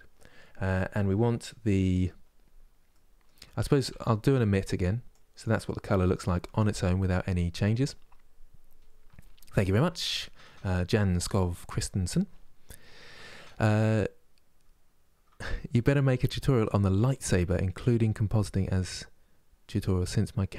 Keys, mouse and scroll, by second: 3.7 ctrl+shift+click, 4.8-20.5 drag.